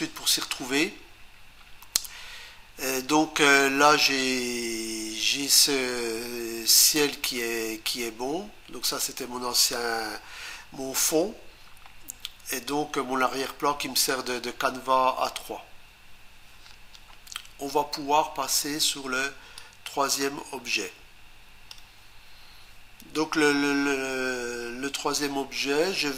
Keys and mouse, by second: 8.8 click, 19.6 click.